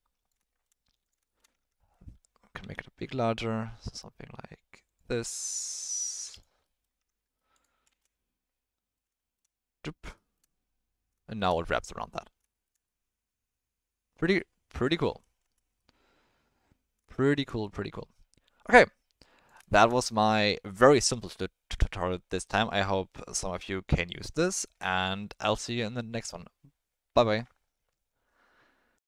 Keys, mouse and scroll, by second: 0.5 shift+middle click, 1.3 shift+middle drag, 1.6 Tab, 1.7 middle click, 2.6 s, 6.0 click, 6.6 middle click, 7.0 Tab, 7.2 middle click, 7.5 click, 7.9 space, 8.0-9.0 middle drag, 9.2 shift+middle drag, 10.1 shift+middle drag, 11.2 shift+middle drag, 12.5 shift+middle click, 12.8-15.0 middle drag, 15.4 space, 15.8-17.0 middle drag, 17.2 shift+middle drag, 17.6 middle click, 18.4-19.4 middle drag, 19.7 shift+middle click, 20.1 ctrl+middle drag, 25.3-25.6 middle drag.